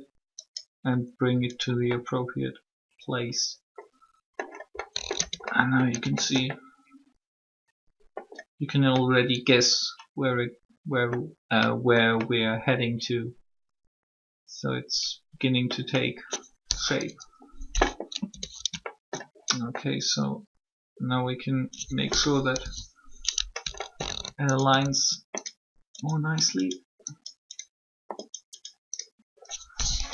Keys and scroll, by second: 5.1 Tab, 17.0 3, 18.3 Tab, 22.4 1, 29.9 typing.